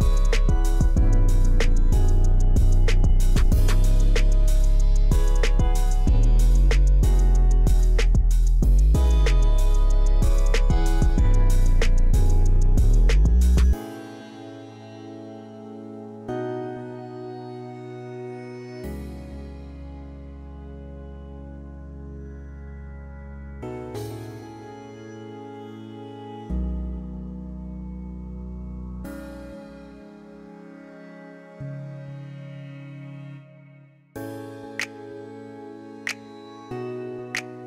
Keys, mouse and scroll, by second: 0.3 middle click, 1.5 click, 6.7 middle click, 9.9 click, 11.8 click, 14.0 click, 16.5 click, 17.5 scroll up 1, 17.9-18.4 middle drag, 19.2-21.5 drag, 22.3 middle click, 22.6 scroll down 1, 23.8-25.4 drag, 25.5 middle click, 25.8-26.4 middle drag, 27.1 F8, 27.8-28.8 middle drag, 29.8-31.5 shift+drag, 31.7-32.4 shift+middle drag, 32.7 shift+middle click, 34.4-36.1 shift+drag, 36.4-37.6 shift+middle drag.